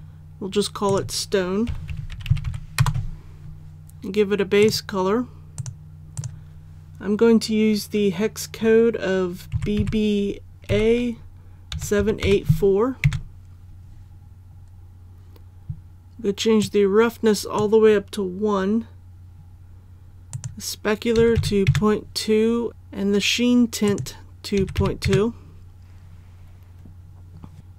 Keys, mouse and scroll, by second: 1.6-2.8 typing, 4.6 click, 9.5-10.7 typing, 11.7 KP_7, 12.0 KP_8, 12.2 KP_4, 16.6 click, 21.1 KP_Decimal, 21.3 KP_2, 22.7 click, 24.6 KP_Decimal, 24.8 KP_2, 26.0 KP_2, 27.6 click.